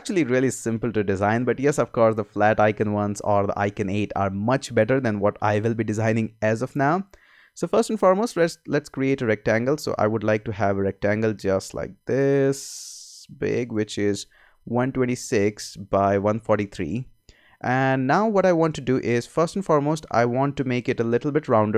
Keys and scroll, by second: 8.4 r.